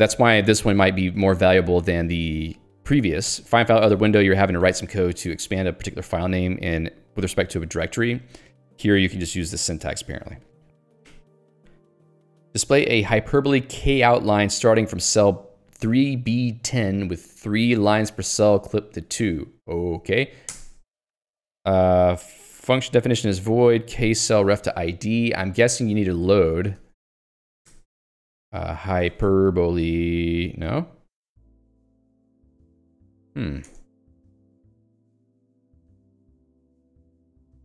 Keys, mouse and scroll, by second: 1.2-2.7 typing, 1.7 Escape, 3.9 Escape, 4.2 l, 7.1 h, 8.0 j, 8.3 h, 9.1 shift+v, 9.9 Escape, 10.8 Escape, 11.1 j, 12.8 h, 20.6 alt+Return, 24.5 ctrl+g, 26.4 alt+x, 26.8 ctrl+g, 27.4 alt+x, 27.9 Return, 28.7-30.0 typing, 32.0 ctrl+j, 33.8 Return, 36.1 ctrl+alt+j, 36.5 h, 37.0 ctrl+g.